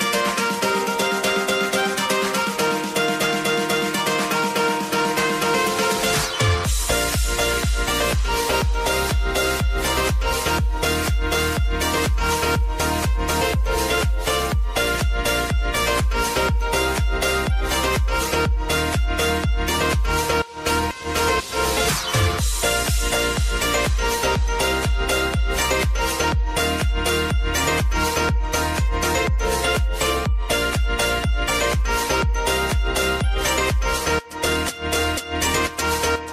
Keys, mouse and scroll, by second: 4.3 space, 6.0-19.4 drag, 19.4 ctrl+alt+Home, 20.7-29.7 drag, 34.0 click, 34.7 shift+a, 35.6 ctrl+a.